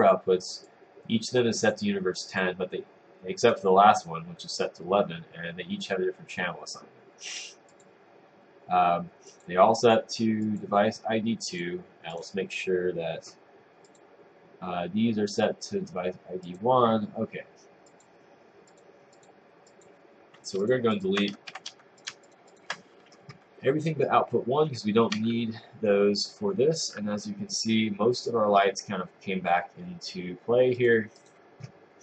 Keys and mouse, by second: 25.2 Delete.